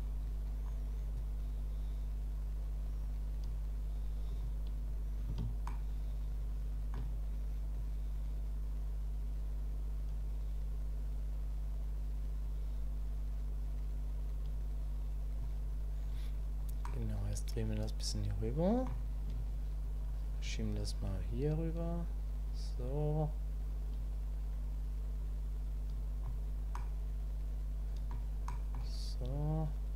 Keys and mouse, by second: 0.2 click, 1.1-4.4 drag, 5.7-6.9 shift+middle drag, 7.8-15.4 drag, 16.8-18.8 drag, 20.1 click, 21.5-23.4 drag, 23.4-24.6 drag, 26.7-28.1 drag, 28.5 click, 29.3-29.9 drag.